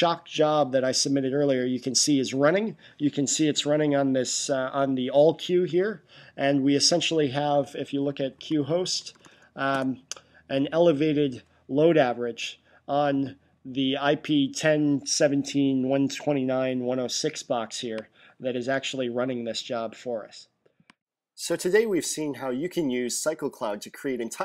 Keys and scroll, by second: 8.2-9.7 typing.